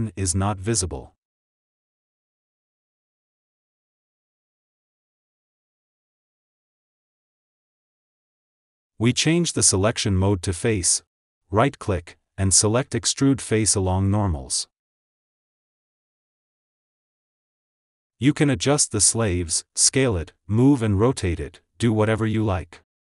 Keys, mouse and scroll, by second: 0.6 g, 2.8 click, 3.4 g, 5.1 click, 5.3 s, 7.2 KP_1, 7.2 click, 8.0 a, 9.1-10.2 middle drag, 10.2-11.4 right drag, 11.4 click, 11.7 ctrl+z, 12.1-17.1 right drag, 17.1-17.7 scroll up 1, 17.7 Tab, 18.3 s, 19.6 ctrl+z, 19.9 Tab, 20.4 a, 20.7 s, 22.0 click, 22.6 g.